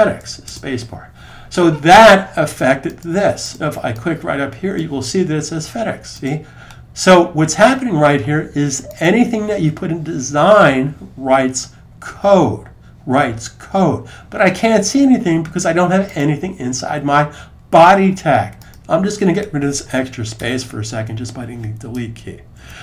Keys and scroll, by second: 22.4 super+s.